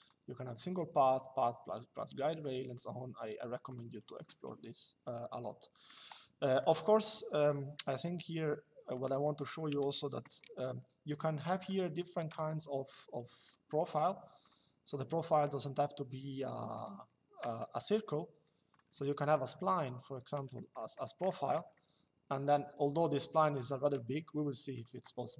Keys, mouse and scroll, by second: 2.1 click, 3.4 click, 5.6 click, 8.6 click, 11.3 click, 16.4 click, 17.6 Escape, 18.4 click, 19.4 shift+middle click, 21.4 shift+middle click, 24.4 click.